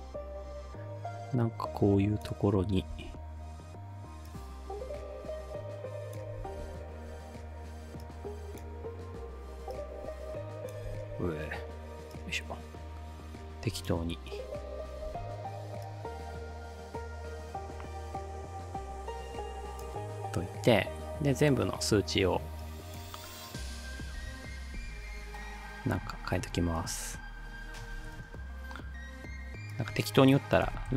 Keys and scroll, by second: 3.0 ctrl+v, 6.4 ctrl+v, 11.0 ctrl+z, 15.1 ctrl+d, 24.2 5, 24.8 2, 25.1 Return, 27.7-28.5 typing, 30.4-30.9 typing.